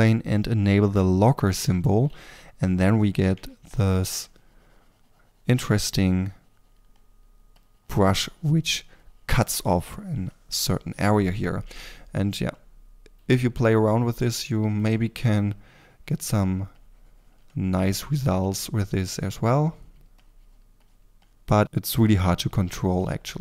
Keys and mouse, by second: 2.0 f, 3.7 f, 9.1-13.1 drag, 13.1 f, 13.7-14.7 drag, 14.7 f, 21.9 f, 23.0-23.4 drag, 23.0 f.